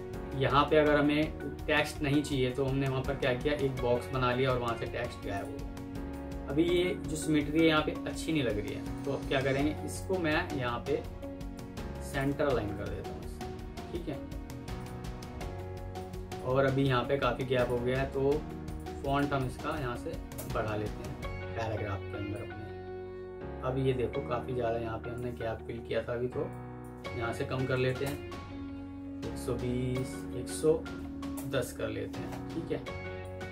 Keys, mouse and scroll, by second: 6.0 alt+click, 7.8 Delete, 8.8 alt+click, 11.9 shift+click, 12.2 typing, 12.6 Escape, 13.1 alt+scroll down 1, 14.0 F3, 16.3 Escape, 18.9 double click, 19.9 typing, 20.2 Return, 21.3 alt+scroll down 1, 27.4 typing, 27.9 Return, 30.5-30.9 typing, 31.2 Return.